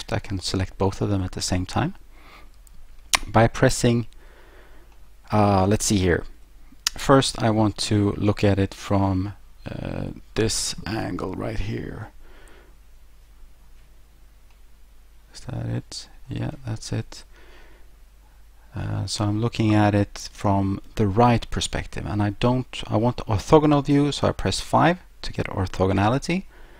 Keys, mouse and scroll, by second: 1.8 middle click, 5.0 middle click, 7.3 scroll down 3, 7.8 middle click, 11.3 1, 11.9 3, 14.5 middle click, 17.2 1, 18.1 3, 24.6 5.